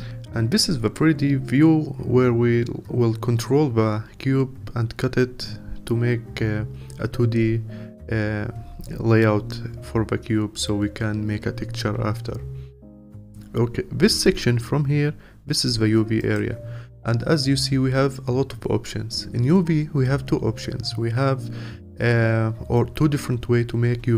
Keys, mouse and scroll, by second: 0.6-4.4 scroll up 1.